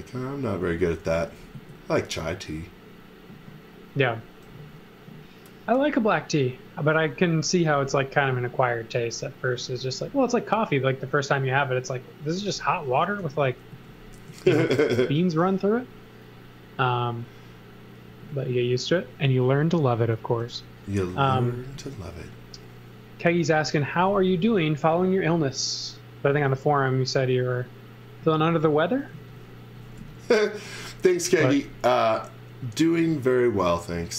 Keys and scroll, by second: 0.6 z, 1.1 s, 4.5 a, 12.3 x, 13.2 e, 13.7 z, 14.3 a, 18.1 space, 19.1 space, 20.3 e, 21.8 a, 22.8 a, 29.2 z, 30.0 x, 31.1 e.